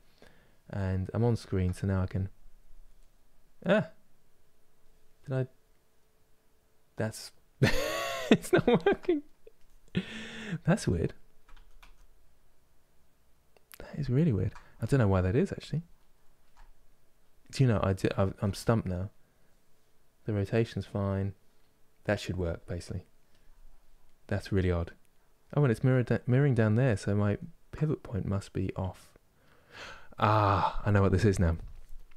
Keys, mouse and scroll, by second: 0.9 ctrl+middle click, 1.5-2.6 drag, 2.6-9.2 middle drag, 9.2 click, 10.1-11.2 middle drag, 11.2 ctrl+z, 11.5 ctrl+z, 14.5-22.9 ctrl+middle drag, 22.9 click, 23.7-26.9 middle drag, 26.9 ctrl+z, 27.4-32.1 middle drag.